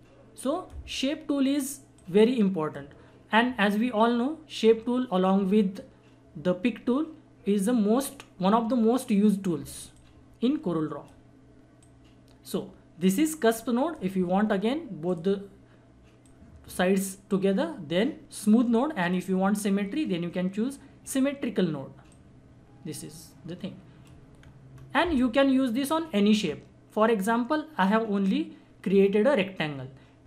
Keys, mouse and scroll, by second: 9.9 click, 9.9-20.3 drag, 24.4-24.7 scroll down 1, 25.5 scroll up 1.